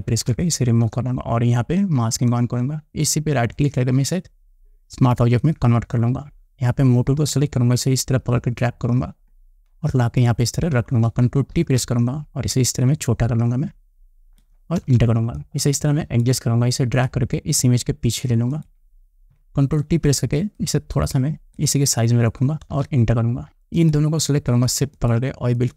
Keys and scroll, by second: 0.7 ctrl+shift+i, 12.1 ctrl+t, 15.4 Return, 20.4 ctrl+t, 23.3 Return.